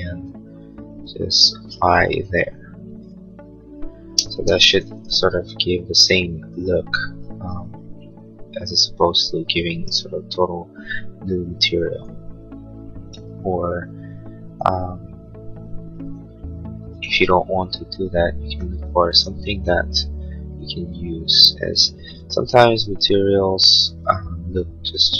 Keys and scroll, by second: 4.0 space, 4.5 Escape.